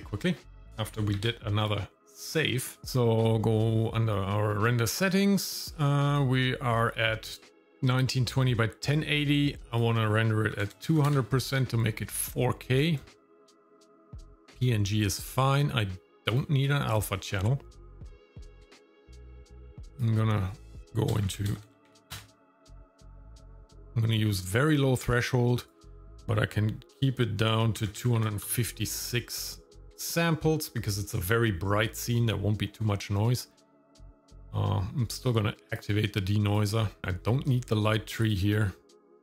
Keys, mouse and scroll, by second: 1.2 ctrl+s, 2.8 scroll up 4, 2.9 click, 6.1 click, 9.7-11.2 drag, 10.9 KP_0, 13.1-13.7 scroll down 4, 16.2 click, 17.8-18.6 scroll down 2, 18.6-19.2 scroll up 2, 19.4 click, 19.8 scroll down 2, 19.9-22.1 drag, 21.6 KP_0, 25.6-28.4 drag, 33.9 click, 34.4 click, 35.1 click, 35.7 click, 36.5 click, 37.0-37.5 scroll down 3, 37.5 click, 38.2 click, 39.0-39.2 drag.